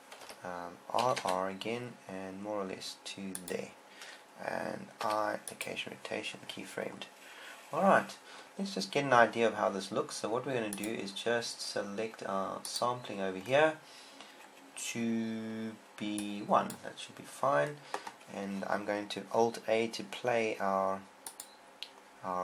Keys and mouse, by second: 1.6 r, 1.6 r, 4.2 click, 6.1 i, 18.1-22.4 drag.